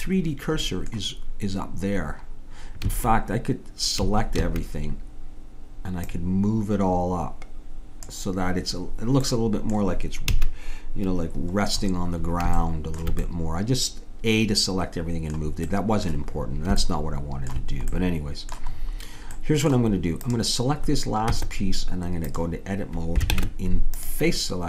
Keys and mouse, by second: 2.9 a, 4.0 a, 4.4 a, 6.0-7.9 drag, 9.3-10.3 drag, 10.3 a, 13.3-15.0 middle drag, 15.7 middle click, 20.2-21.4 drag, 21.4 Tab, 23.3 ctrl+Tab.